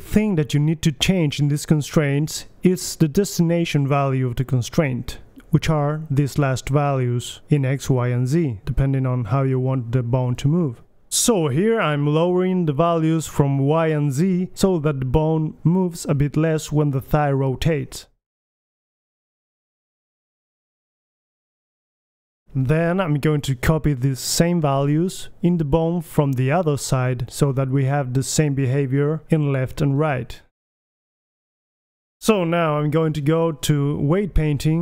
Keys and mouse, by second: 12.4-13.7 drag, 12.8 BackSpace, 15.0-16.4 drag, 17.0-17.7 middle drag, 18.1-18.4 drag, 18.1-18.9 right drag, 18.4 g, 18.9-19.7 middle drag, 23.4-24.6 drag, 24.2-25.4 right drag, 24.9-25.4 drag, 25.4-25.7 middle drag, 25.9 middle click, 26.1-27.1 right drag, 27.8-29.4 drag, 28.5 BackSpace, 30.9 click, 31.4 BackSpace, 32.7-33.7 middle drag, 33.2 KP_3, 34.1 g, 34.3-34.7 drag.